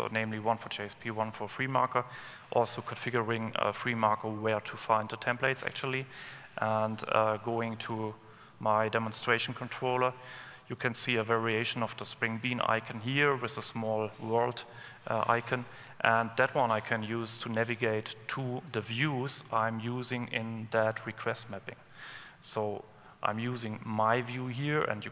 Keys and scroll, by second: 7.0 super+1.